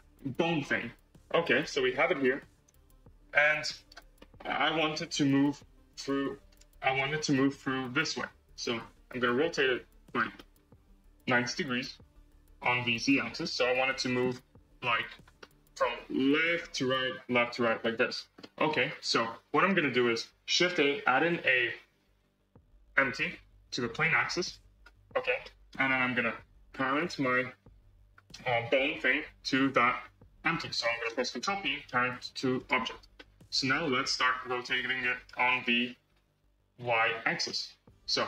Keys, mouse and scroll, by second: 1.3-3.8 drag, 4.1-5.3 middle drag, 5.3 r, 6.8 click, 7.6 r, 10.3-13.2 middle drag, 13.2 scroll, 13.3-18.0 middle drag, 18.0 scroll, 18.3-18.8 middle drag, 18.8 scroll, 19.0-19.6 middle drag, 19.6 scroll, 20.4 shift+a, 24.8 scroll, 25.4-25.8 middle drag, 25.8-26.8 scroll, 26.8 click, 29.4 shift+click, 31.3 ctrl+p, 33.1-34.4 middle drag, 34.4-35.6 drag, 35.6 ctrl+z, 36.3-37.9 drag, 37.9 ctrl+z.